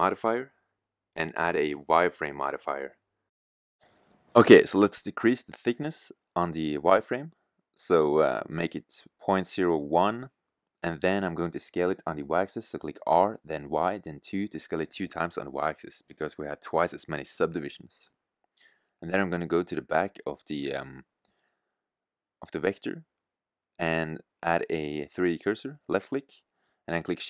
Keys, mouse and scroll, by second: 3.4 middle click, 3.9 middle click, 5.8-8.6 middle drag, 12.1 s, 16.3 middle click, 16.5 middle drag, 22.8 middle click, 23.9 middle click, 24.1 middle click, 24.3 middle click, 25.9 shift+a.